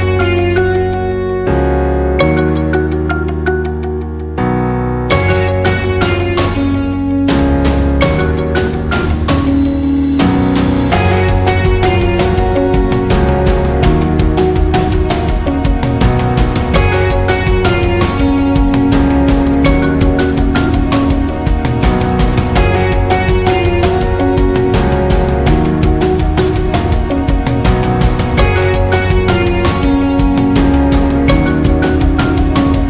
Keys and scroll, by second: 7.7 ctrl+0.